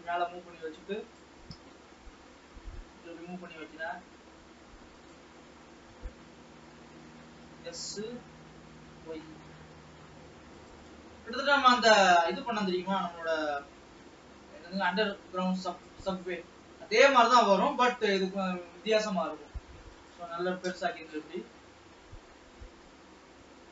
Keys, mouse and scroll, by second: 1.6 g, 6.1 scroll down 3, 6.4 middle click, 7.7 s, 11.1-13.1 middle drag, 13.1-15.1 scroll up 2, 15.1 click, 15.7-16.7 drag, 16.7 middle click, 17.4-17.9 scroll down 4, 17.9 g, 20.8 KP_0, 22.3-23.0 scroll up 1, 23.0 alt+a.